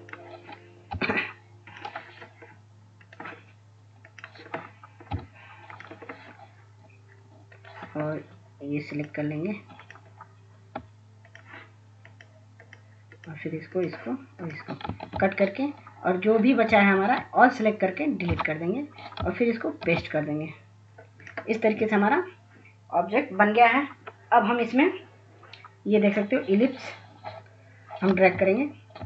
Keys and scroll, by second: 1.1 i, 5.3 i, 15.4 ctrl+x, 17.3 ctrl+a, 18.7 Delete, 20.2 ctrl+f.